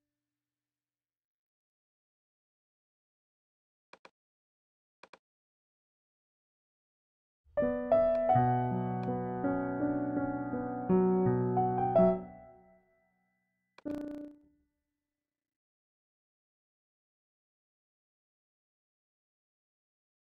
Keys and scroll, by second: 0.0 super+z, 7.3 space, 12.0 space.